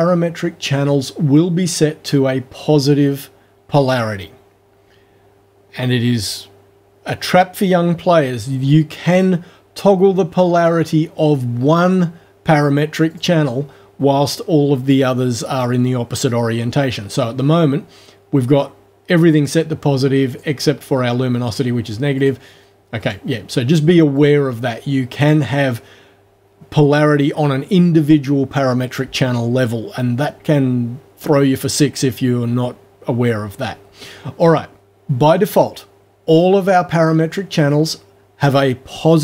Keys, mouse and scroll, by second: 9.1 click, 10.6 click, 13.1 click, 19.5 click, 20.3 click, 22.2 click, 23.0 click, 24.2 click, 25.2 click.